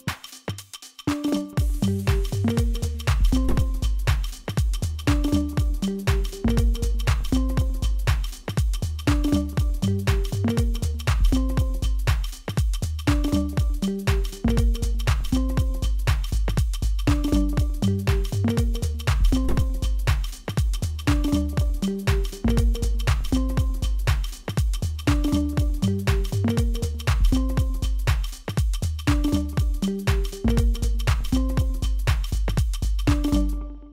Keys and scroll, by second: 0.3 Return, 17.4 ctrl+r, 18.6 ctrl+r, 20.2 ctrl+r, 21.9 ctrl+r, 23.3 ctrl+z, 25.1 ctrl+r, 33.3 g.